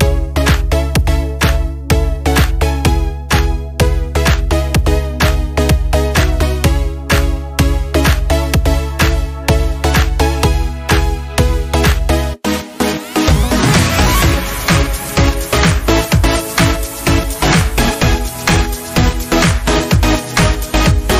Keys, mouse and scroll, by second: 0.4 click, 5.8 click, 7.7 scroll down 1, 17.9 scroll up 1, 19.3 Escape.